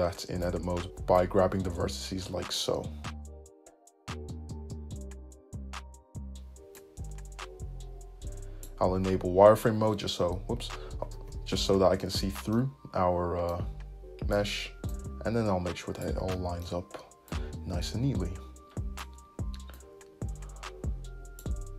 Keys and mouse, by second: 0.5-2.7 drag, 2.7-9.1 right drag, 11.4 alt+super+z.